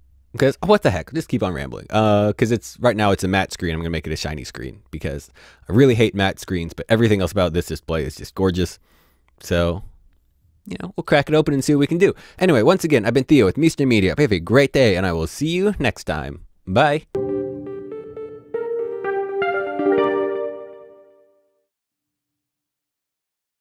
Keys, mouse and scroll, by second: 8.9 ctrl+Num_Lock, 9.1-11.1 drag.